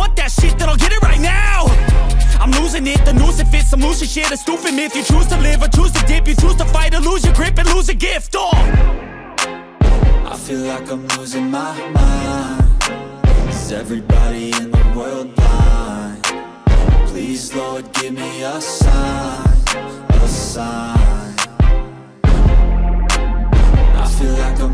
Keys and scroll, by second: 0.9 ctrl+-, 1.7 ctrl+-, 1.9-4.8 typing, 2.1 ctrl+-, 3.2 ctrl+alt+z, 4.6 ctrl+-, 6.2 ], 8.6 space, 17.3 ctrl+alt+z, 18.5 ctrl+=, 20.7 ctrl+-, 20.9 space, 21.1 ctrl+-, 21.3 ], 22.8 ctrl+alt+z, 23.3 space, 24.6 ctrl+=.